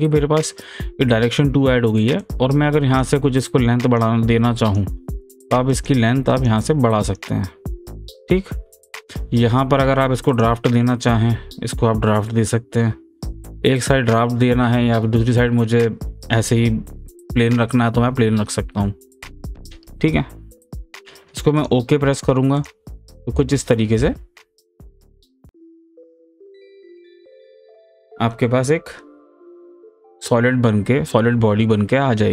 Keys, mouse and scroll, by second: 2.2-4.0 drag, 4.0 click, 5.7 click, 6.3 click, 7.0 click, 10.3 click, 13.5-21.2 middle drag, 21.6 click, 24.9 click, 25.7 shift+click, 26.3 right click, 27.3 click, 28.0 click, 28.4-32.3 middle drag.